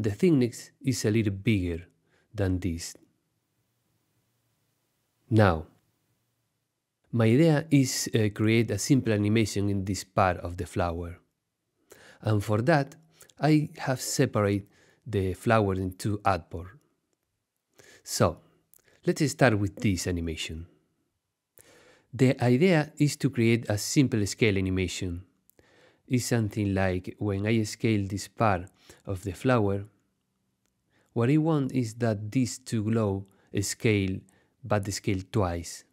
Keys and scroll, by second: 30.3 shift+super+z, 31.0 super+z.